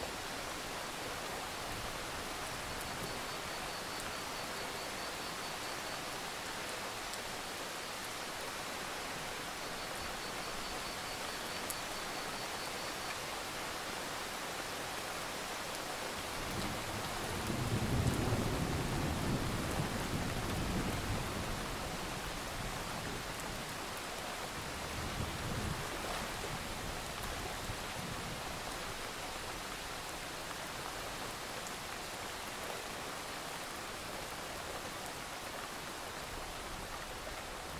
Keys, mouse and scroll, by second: 2.1 KP_5, 2.8 click, 4.8 alt+scroll down 1, 5.1 scroll up 1, 5.3 alt+scroll down 1, 5.5-7.3 scroll up 3, 7.3 click, 7.8-8.1 alt+scroll down 1, 8.3 alt+scroll up 1, 11.8 scroll up 1, 12.1 scroll down 1, 12.3 click, 13.8-14.8 drag, 15.5 ctrl+z, 16.0 shift+click, 16.2 alt+scroll down 1, 16.6 click, 17.2 ctrl+z, 17.7 ctrl+g, 18.1 alt+scroll up 1, 19.8 click, 20.3 alt+click, 20.8 click, 22.1 alt+scroll up 1, 22.7-24.0 drag, 24.1 alt+scroll down 1, 24.3 click, 24.5 scroll up 1, 25.3 right click, 25.7 click, 26.9-28.0 alt+scroll up 2, 28.0 Delete, 28.6 click, 29.0 Delete, 30.2 click, 37.1-37.5 alt+scroll up 1, 37.5 click.